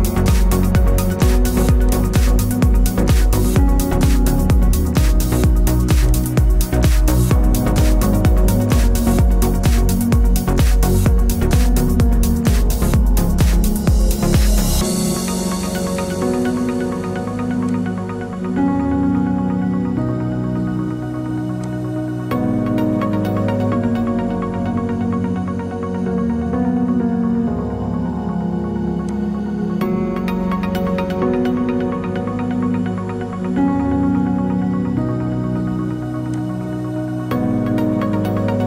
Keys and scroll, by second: 10.4 ctrl+j, 26.6 ctrl+t.